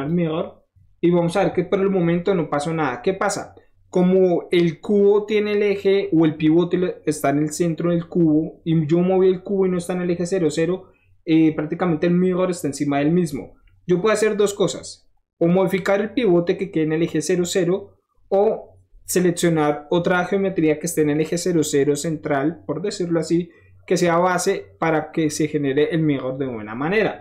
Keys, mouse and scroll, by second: 0.9 middle drag, 1.7 scroll down 1, 2.1 middle click, 9.2-9.6 middle drag, 10.8 scroll down 1, 11.2-12.3 middle drag, 12.7-14.2 middle drag, 14.3 middle click, 14.9 middle click, 15.0 middle click, 15.5 middle click, 15.7 middle click, 16.1-18.0 middle drag, 18.1 middle click, 18.4-27.2 middle drag.